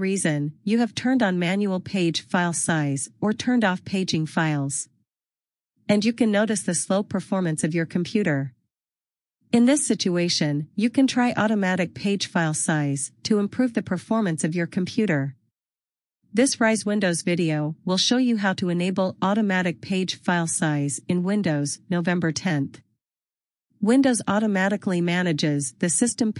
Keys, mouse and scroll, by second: 15.8-16.5 scroll.